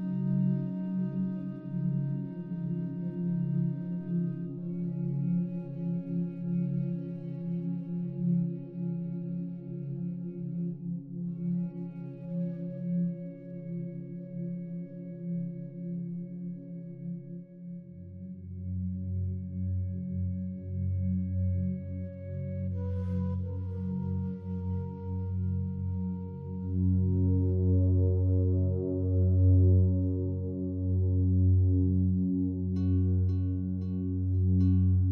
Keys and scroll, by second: 10.7 ctrl+t.